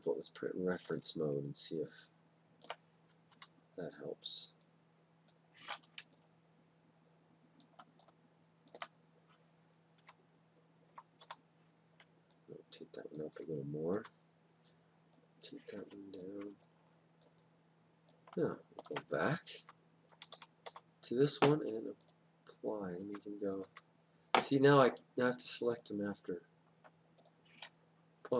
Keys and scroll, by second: 3.3 Down, 10.2 Down, 10.9 Up, 13.3 Down, 19.6 Down, 20.1 Up, 23.0 Down.